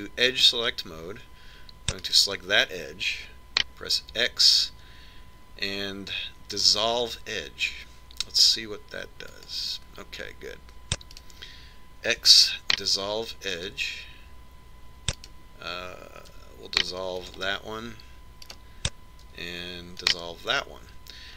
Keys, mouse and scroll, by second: 0.4 ctrl+Tab, 3.5-5.4 right drag, 5.7 x, 12.7-14.4 right drag, 13.8 x, 16.7-18.5 right drag, 17.9 x, 20.0-21.3 right drag, 20.9 x.